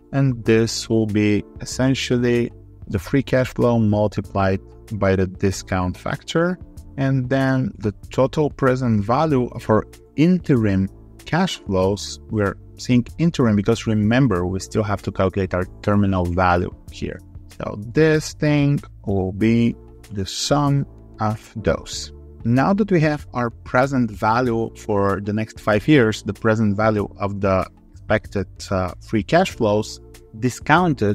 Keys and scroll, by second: 6.3 ctrl+r, 6.7 ctrl+Left, 19.2 alt+4, 20.0 Tab, 21.4 ctrl+Right.